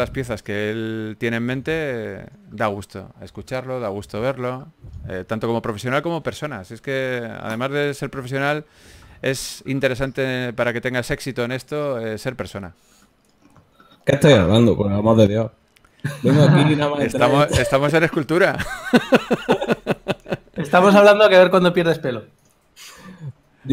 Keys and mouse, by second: 7.4 f, 9.6 a, 10.0 ctrl+s, 14.3 right click, 14.7 Tab, 15.6 z, 17.0 Right, 17.0 KP_1, 17.4 b, 22.7 c.